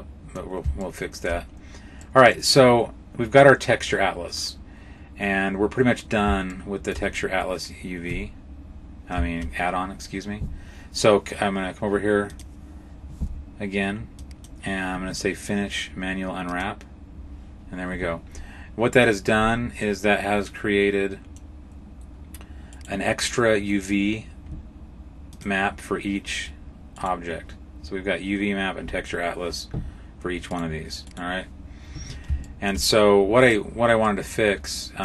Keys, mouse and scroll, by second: 0.7 shift+middle click, 1.8 middle click, 6.3 shift+middle click, 7.9 Tab, 8.5-9.2 scroll down 2, 14.0 click, 16.3 click, 19.7 middle click, 19.8 middle click, 22.6 right click, 25.2 click, 26.8 right click, 30.3 right click, 30.9 right click, 32.3 shift+middle click, 33.3 right click, 33.9 middle click.